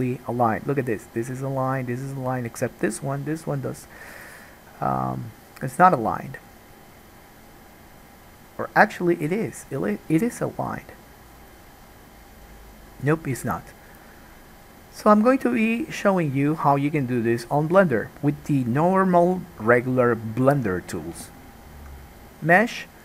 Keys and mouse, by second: 22.3-23.0 drag.